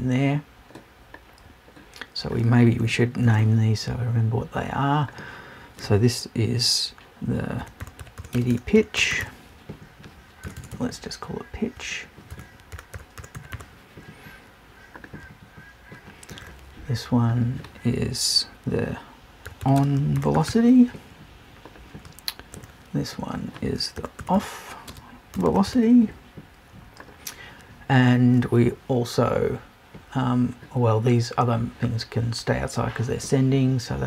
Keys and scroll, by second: 10.4 BackSpace, 12.3 BackSpace.